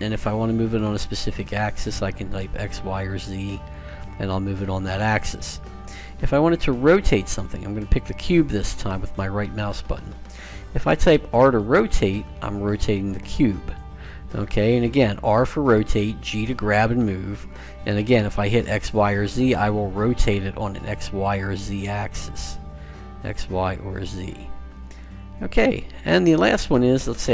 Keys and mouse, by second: 7.5-9.2 right drag, 11.2 r.